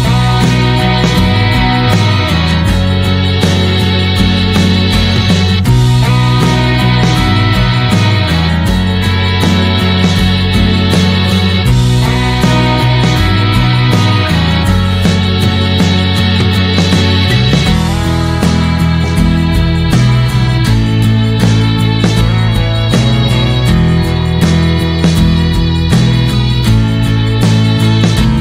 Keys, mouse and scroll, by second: 0.8 scroll down 1, 1.2-2.8 drag, 8.3 scroll up 2, 8.6 middle click, 8.8-9.2 scroll down 1, 9.2-11.6 shift+middle drag, 11.6 g, 17.5-18.6 middle drag, 18.6 d, 18.9 s, 20.9 middle click, 21.7 click, 22.8-24.6 shift+middle drag, 24.6 g, 25.4-28.4 shift+middle drag.